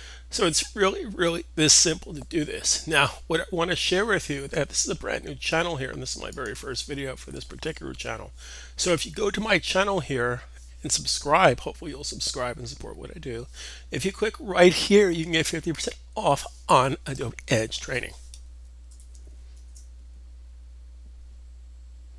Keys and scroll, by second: 18.7 super+., 19.4 super+Tab.